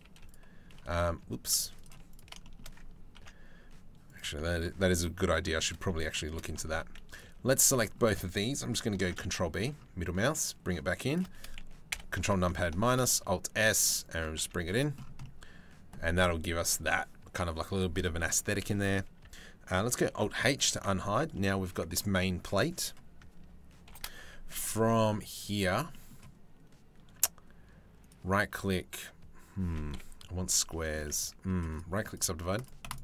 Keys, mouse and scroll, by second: 0.3 ctrl+r, 1.7 alt+click, 2.0 shift+click, 2.1 shift+middle click, 2.8 ctrl+b, 4.6 middle click, 5.3 middle click, 5.7 shift+middle click, 6.3 2, 7.4 middle click, 8.5 ctrl+b, 11.5 ctrl+KP_Subtract, 12.4 alt+s, 14.0 Tab, 14.4 middle click, 14.8-17.5 middle drag, 17.5 click, 17.9 click, 18.4 Tab, 18.8 Tab, 19.7 alt+h, 20.1 click, 20.4 click, 20.6 Tab, 20.9 click, 22.3 middle click, 23.4 ctrl+l, 24.4 middle click, 25.5 middle click, 27.6-28.7 drag, 29.5 KP_7, 30.3 shift+middle click, 31.4 click, 32.1 click, 32.5 click, 32.6 click, 32.9 click.